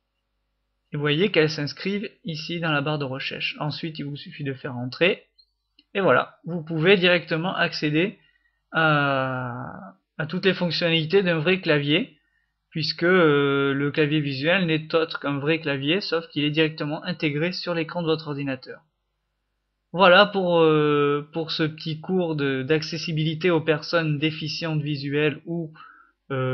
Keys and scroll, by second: 0.0-1.2 typing, 1.3 F5, 3.1-4.3 typing, 13.9-15.0 typing, 22.0 F6.